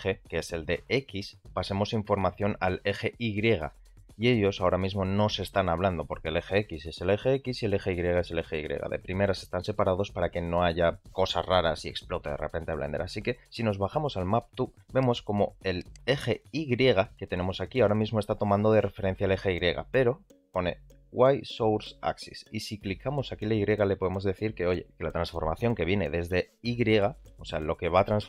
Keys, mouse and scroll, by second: 2.7 click, 3.1 g, 22.5-28.2 drag.